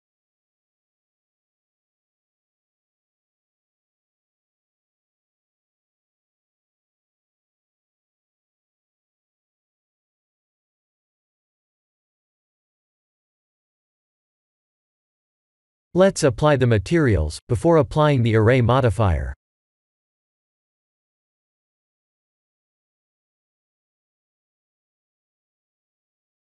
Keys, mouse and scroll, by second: 1.6 g, 5.8 middle click, 6.8 middle click, 7.4 KP_3, 8.4 g, 11.8 middle click, 12.0 middle click, 12.1 middle click, 12.2 middle click, 12.4 middle click, 12.7 middle click, 12.8 click, 13.1 middle click, 13.9 click, 15.4 click, 16.1 click, 17.1 click, 19.7 click, 21.7 click, 22.6 click, 23.5 click, 24.4 click.